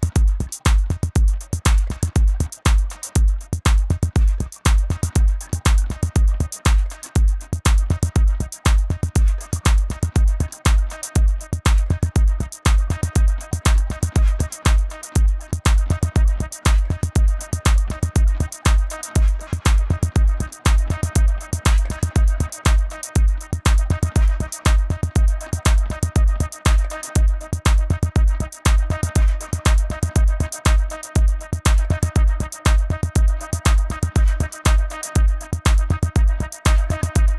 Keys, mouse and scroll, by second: 0.7-1.5 scroll down 1, 1.7 click, 2.3-3.4 scroll up 1, 3.4 click, 7.5-8.0 scroll up 1, 8.0 right click, 10.5 click, 12.5 b, 14.2 click, 27.1 click, 30.4 right click, 32.6 click.